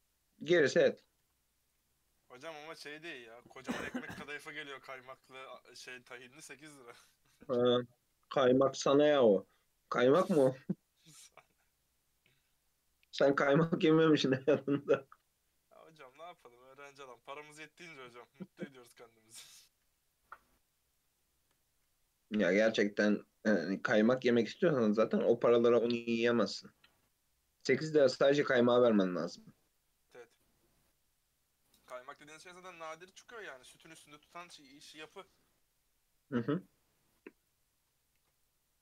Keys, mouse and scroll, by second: 1.6 click, 1.8 h, 2.0 click, 2.4-2.7 middle drag, 2.7 KP_3, 5.7-6.9 scroll up 6, 6.4 shift+middle click, 6.9 click, 7.2 Tab, 7.6-8.1 scroll up 2, 8.1 3, 9.0 ctrl+r, 10.9 scroll down 1, 11.1-14.8 middle drag, 14.8 KP_3, 15.2-16.0 scroll up 2, 16.0 1, 16.2 alt+z, 16.4 click, 17.0 g, 19.9 3, 20.2 click, 21.2 shift+middle click, 21.9 e, 26.7 shift+middle click, 27.0 scroll down 2, 27.2-28.7 middle drag, 28.7 s, 32.5 KP_3, 33.6 shift+middle click, 34.2 click, 35.1 e, 38.2 ctrl+r.